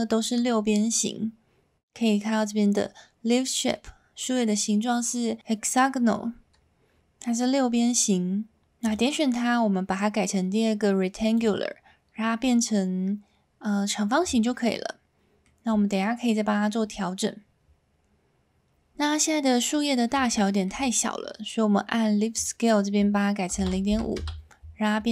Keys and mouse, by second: 8.8-11.5 drag, 14.7-15.4 middle drag, 16.0-16.6 middle drag, 20.4 shift+middle drag, 22.3-24.6 drag.